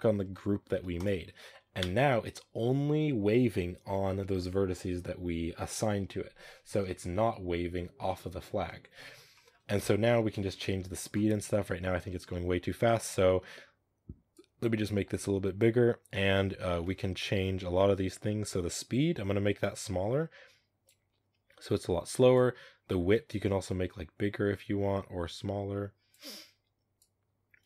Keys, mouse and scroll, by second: 0.9 click, 1.3 middle click, 1.7 space, 1.8 middle click, 1.8-4.4 scroll down 2, 6.7 shift+middle drag, 6.9 scroll up 2, 7.7 scroll down 2, 7.9-9.6 middle drag, 9.6 KP_0, 10.4-13.5 shift+middle drag, 14.2-16.9 drag, 16.9-18.3 shift+middle drag, 18.3-25.4 drag, 26.9-27.6 drag.